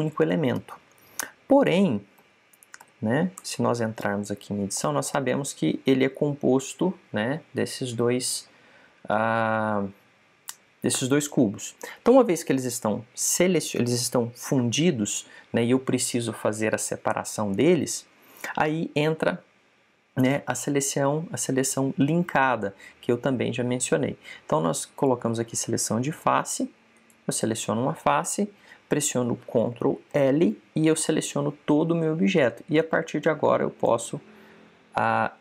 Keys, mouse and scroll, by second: 2.1-4.2 middle drag, 3.0 a, 3.7 a, 4.2 Tab, 5.7-7.0 middle drag, 7.0 click, 26.3-28.0 drag, 27.8 right click, 31.0 ctrl+l, 33.6 click.